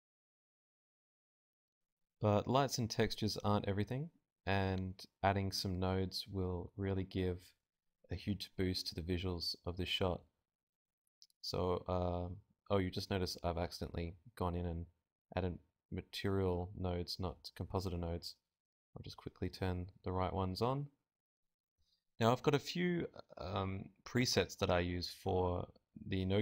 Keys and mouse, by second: 0.7-6.7 drag, 7.6 middle click, 7.9 right click, 8.4 middle click, 9.0 g, 9.2-10.4 drag, 9.5 g, 13.0 right click, 13.9-14.9 drag, 14.3 Delete, 14.5 Delete, 21.2 click, 21.6 middle click, 22.1 right click, 22.1 g, 22.7 click, 23.5 middle click, 24.2 right click, 25.0 middle click, 25.5 right click, 25.5 shift+a, 26.3 middle click.